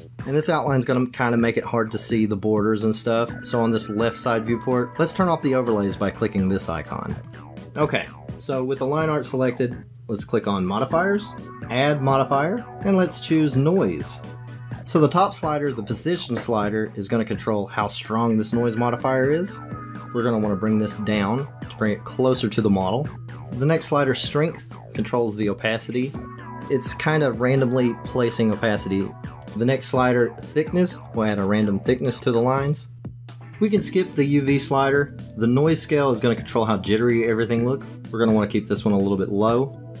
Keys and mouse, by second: 7.2-8.8 drag, 11.4 click, 12.1-14.5 drag, 17.3-23.3 drag, 25.1-26.6 drag, 31.0-33.4 drag, 36.3-40.0 drag.